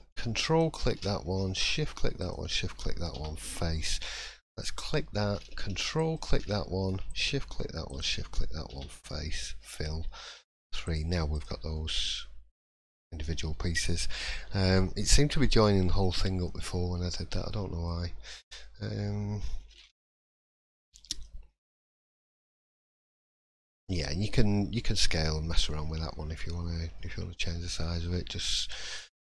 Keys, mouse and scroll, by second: 0.4 ctrl+click, 1.6 shift+click, 2.5 shift+click, 3.1 f, 4.4 click, 5.9 ctrl+click, 7.1 shift+click, 8.1 shift+click, 8.7 f, 10.2 3, 10.8 click, 11.7 middle click, 12.0-12.6 scroll down 2, 12.6 click, 13.0 shift+middle click, 13.5 scroll down 2, 13.7 middle click, 14.4-14.8 scroll up 3, 15.7-16.1 scroll down 3, 16.1 middle click, 17.1 shift+middle click, 17.8 middle click, 18.6 shift+middle click, 19.8-20.3 scroll up 2, 20.3-20.8 scroll down 2, 20.9 shift+middle click, 21.4 scroll up 1, 22.0 middle click, 23.2 scroll down 1, 23.6 shift+middle click, 24.8 scroll down 1, 25.2 shift+middle click, 27.8 shift+middle click, 28.9-29.3 scroll up 1.